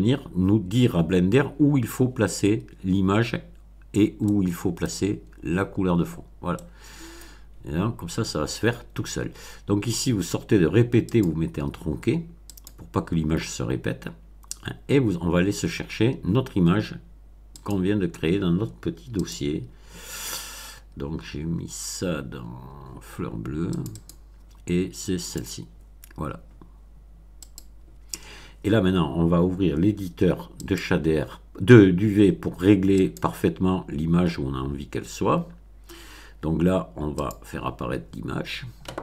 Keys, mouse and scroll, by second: 4.2 middle click, 6.5 middle click, 11.1 click, 12.5 click, 17.5 click, 19.2 click, 23.7 click, 25.2 click, 27.4 click, 30.6 click, 33.0 click, 35.4 scroll down 1, 35.9 scroll down 1, 37.2 click.